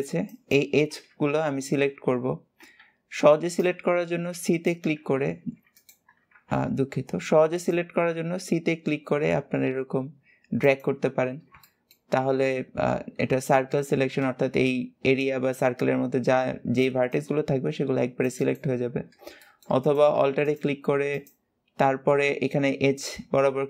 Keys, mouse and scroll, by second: 2.5 c, 6.0 alt+a, 6.3 v, 7.0 c, 11.4 shift+middle click, 12.0-12.7 scroll up 1, 12.7-13.9 scroll up 1, 13.9 c, 19.3 shift+middle click, 19.7 click, 20.9 alt+shift+click.